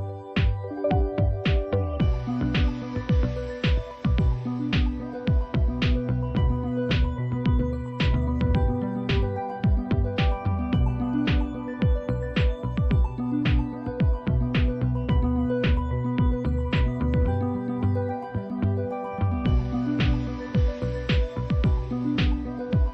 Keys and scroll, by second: 2.8 typing, 4.3-6.5 typing, 11.5 Right, 20.9 Return.